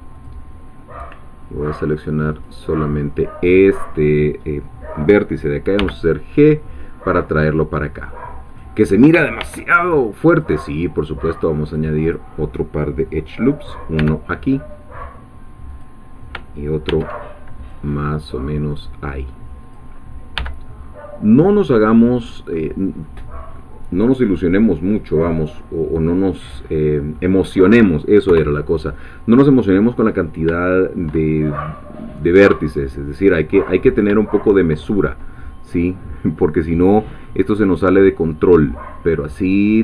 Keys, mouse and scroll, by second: 0.1 click, 1.8 click, 5.8 g, 8.5 click, 9.4 ctrl+r, 10.3 click, 11.6 click, 12.1-14.0 drag, 14.0 g, 15.7 click, 16.9 ctrl+r, 17.6 click, 18.7-19.9 drag, 20.4 g, 22.0 click, 22.9-23.3 scroll down 1, 23.6-24.7 middle drag, 24.7-25.1 scroll down 1, 25.4-27.3 middle drag, 27.5-28.3 scroll up 1, 28.3 3, 30.1 scroll down 1, 30.6 shift+middle click, 32.1-32.5 scroll up 1, 32.8 shift+middle click, 33.6-34.1 shift+scroll up 1, 34.2 shift+middle click, 36.7 click, 37.3-38.5 middle drag, 38.5 scroll down 1, 38.9-39.8 middle drag.